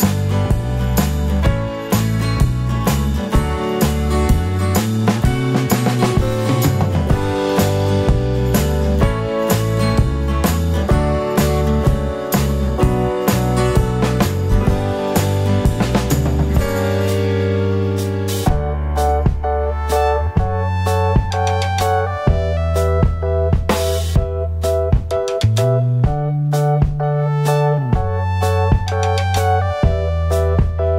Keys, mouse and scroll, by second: 0.3 `, 2.6-3.0 scroll down 1, 4.1-16.8 drag, 5.1 `, 7.0-7.4 scroll up 1, 16.8 ctrl+v, 19.9-24.1 drag, 22.2 scroll up 2, 22.4 `, 22.8 scroll up 2, 23.0 `, 25.9-28.6 drag, 26.1-26.7 scroll down 2, 26.7 scroll up 2, 26.8 `, 27.2-28.0 scroll down 2, 28.0 scroll down 1, 28.4 scroll up 2, 29.0 Tab, 29.2 click, 29.7 ctrl+l.